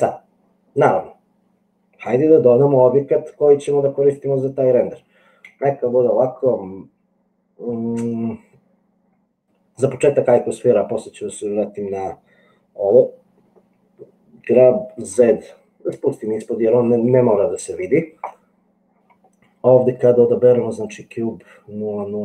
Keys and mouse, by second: 5.4 shift+a, 14.8 g.